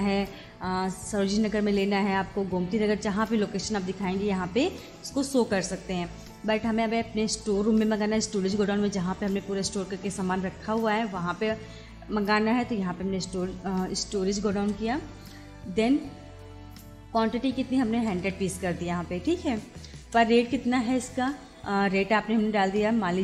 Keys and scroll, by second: 14.7 Return, 17.9 1, 20.0 Return.